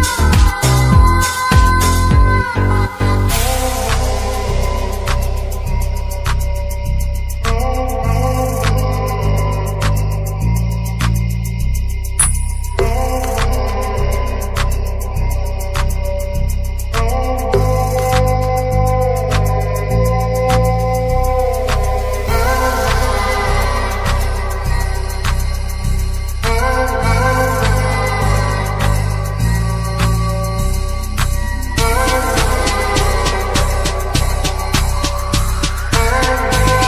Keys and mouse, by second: 1.1 click, 2.1 click, 3.6 click, 5.0-7.3 drag, 8.3 middle click, 9.1-9.7 shift+middle drag, 11.4 click, 16.8 middle click, 17.8-19.4 shift+middle drag, 25.6 click, 26.4-28.2 drag, 29.4-29.9 drag, 32.1 click, 33.8 click, 35.7 click, 36.3 click.